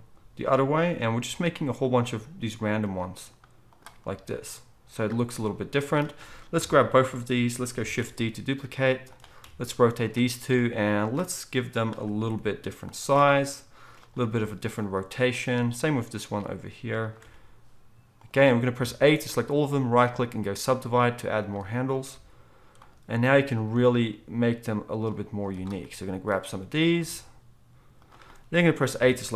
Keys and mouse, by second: 2.1 g, 6.5-15.5 middle drag, 6.5 a, 6.9 KP_7, 8.0 shift+d, 9.4 r, 12.2 g, 13.1 r, 14.2 g, 15.5 click, 15.5 g, 16.2-20.3 middle drag, 17.2 r, 18.7 a, 20.3-29.3 right drag, 22.1 g, 23.7 g, 26.8 click, 26.8-29.3 middle drag, 27.0 g, 28.9 a.